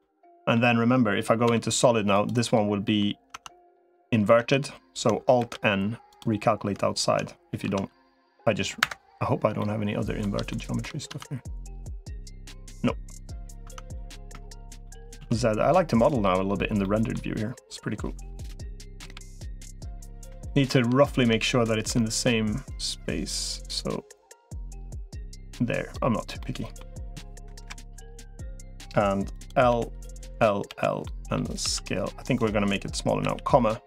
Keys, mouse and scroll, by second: 1.3 z, 2.6 middle click, 3.1 Tab, 4.3 Tab, 5.3 alt+n, 7.5 z, 9.4 middle click, 10.3 shift+middle click, 10.9 Tab, 11.5-13.1 middle drag, 13.5 Tab, 13.7 middle click, 14.3 shift+middle click, 14.6 middle click, 15.1 z, 16.7 middle click, 18.3 KP_1, 18.9 KP_3, 20.2 shift+middle click, 21.4 middle click, 22.5-25.7 drag, 26.2 middle click, 27.3 KP_Decimal, 29.1 click, 29.5 l, 30.1 l, 30.5 l, 30.8 middle click, 31.5 s, 33.1 ,.